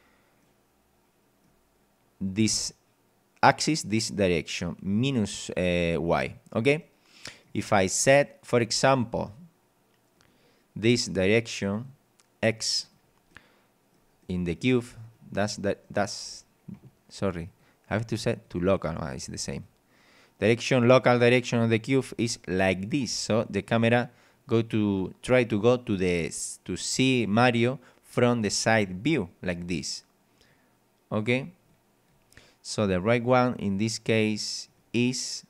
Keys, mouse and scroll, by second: 0.4-1.6 middle drag, 6.8 middle click, 10.2 right click, 11.7 click, 12.8 click, 13.3 middle click, 14.2 middle click, 15.0 right click, 15.5 scroll down 1, 15.8 middle click, 15.9 click, 16.1 middle click, 17.4 click, 18.3 click, 19.2 click, 21.7-22.0 scroll up 2, 25.0-28.8 middle drag, 30.5 click, 31.7 click, 34.6 right click.